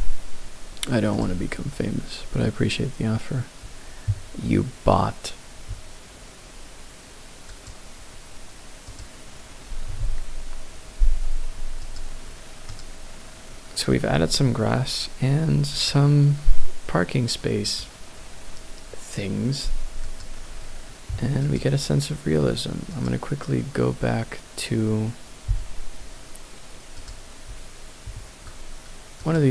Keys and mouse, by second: 8.9 click, 11.8 click, 12.7 click, 15.8 click, 17.6 click, 20.0 click.